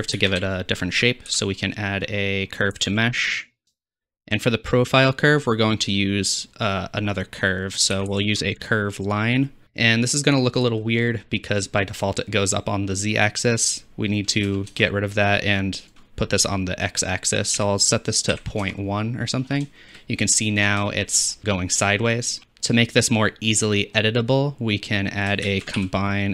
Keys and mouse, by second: 0.2 shift+a, 5.5-9.6 drag, 9.9 click, 11.6-19.7 drag, 25.5 shift+a.